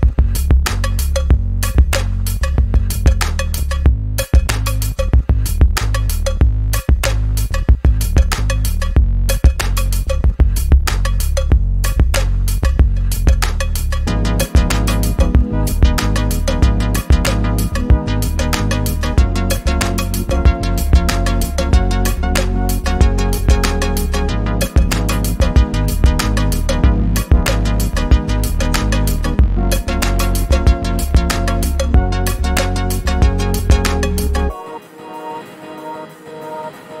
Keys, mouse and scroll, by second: 1.0 ctrl+scroll down 1, 2.8 click, 3.8 ctrl+scroll down 1, 10.9-11.5 click, 11.6 ctrl+z, 13.7 r, 14.7-15.6 drag, 26.1 ctrl+d, 26.7 click, 29.3 click, 31.4 ctrl+z, 31.5 click, 32.5 Delete, 33.6-34.2 click, 34.5 ctrl+z, 36.0 click.